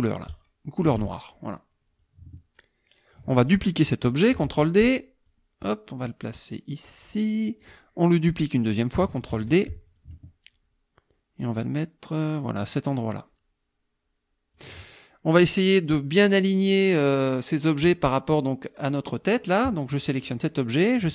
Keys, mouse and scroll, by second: 0.3 shift+click, 2.0 ctrl+click, 4.4 ctrl+d, 5.3-7.8 drag, 9.3 ctrl+d, 10.0-14.8 ctrl+drag, 18.3 click, 20.2 click.